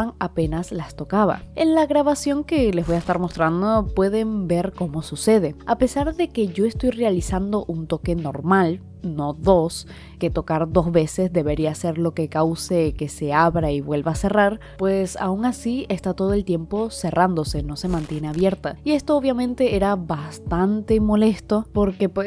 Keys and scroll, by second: 19.0 i, 19.5 i, 19.6 i, 20.8 i, 21.0 i.